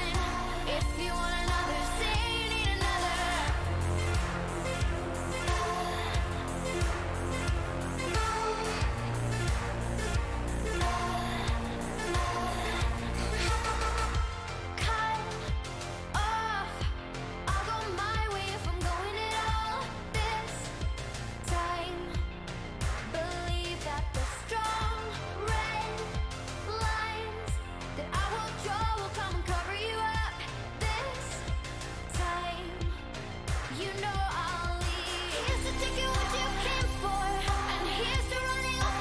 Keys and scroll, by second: 0.0-1.6 typing, 1.8 Return, 15.0-18.4 typing, 18.9 Down, 19.3 Return, 25.6 q, 28.4 ctrl+c, 29.0 ctrl+v, 35.8 ctrl+c, 36.3 ctrl+v.